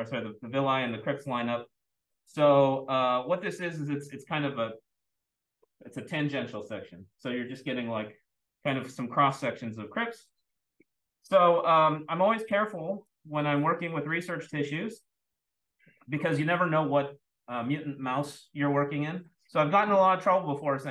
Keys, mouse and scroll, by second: 10.0-11.5 scroll up 2, 13.0 click.